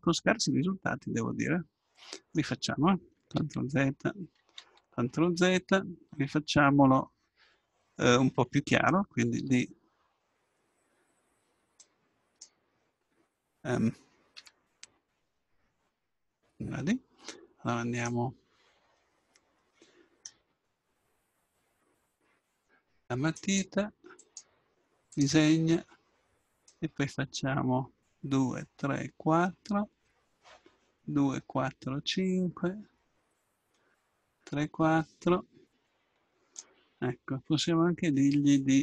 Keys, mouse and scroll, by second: 3.4 ctrl+z, 4.6 ctrl+z, 6.2 KP_7, 9.4 d, 11.8-13.6 drag, 14.4 d, 15.3-17.2 drag, 18.0-19.9 drag, 23.4-27.1 drag.